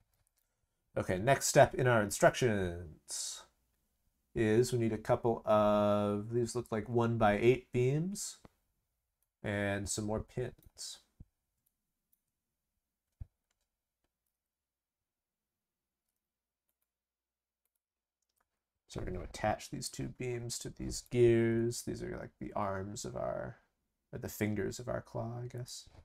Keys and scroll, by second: 21.3 ctrl+c, 21.5 ctrl+v.